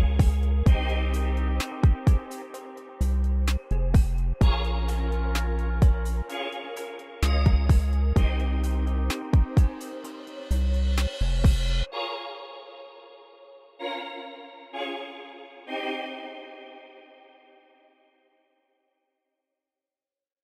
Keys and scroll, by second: 17.3 ctrl+m, 19.8 space.